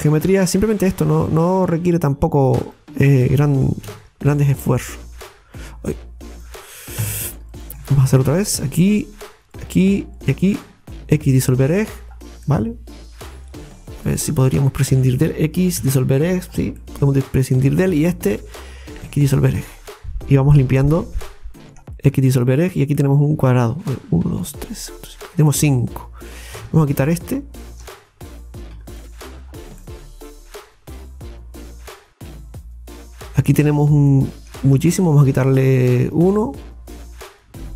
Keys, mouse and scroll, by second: 0.5 right click, 2.7 alt+shift+right click, 3.9 c, 7.0 Escape, 7.5 right click, 8.2 alt+shift+right click, 8.4 alt+shift+right click, 9.6 alt+shift+right click, 10.2 alt+shift+right click, 11.2 x, 12.1-12.4 scroll down 2, 12.5-13.9 middle drag, 13.9 alt+shift+right click, 14.1 alt+shift+right click, 15.8 x, 16.5 scroll down 2, 16.8-18.3 middle drag, 18.3 alt+shift+right click, 19.1 x, 19.8-20.2 scroll down 4, 20.5-22.0 middle drag, 22.0 right click, 22.2 x, 23.0-25.4 middle drag, 25.4 scroll up 1, 26.3 right click, 26.9 right click, 27.6 shift+right click, 29.4-29.7 scroll down 2, 29.8-32.7 middle drag, 32.7-33.9 scroll up 3, 33.2 middle click, 34.1-36.1 middle drag, 36.1 alt+shift+right click.